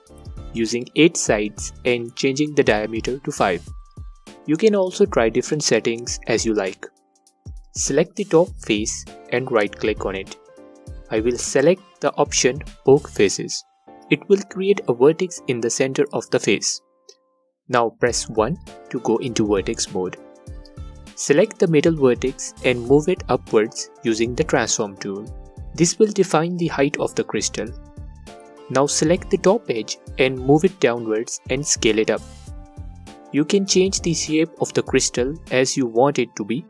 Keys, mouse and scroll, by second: 3.3 click, 5.1-5.4 scroll up 2, 6.2 Tab, 7.8 middle click, 8.6 3, 9.0 click, 9.9-14.6 right drag, 12.4 1, 14.6 click, 15.3 space, 18.2-24.2 drag, 23.3 2, 24.4 click, 25.7-30.1 drag, 27.8 s, 30.6-31.3 scroll down 1, 31.5-32.6 alt+drag, 32.6-35.5 middle drag, 35.5-36.6 drag.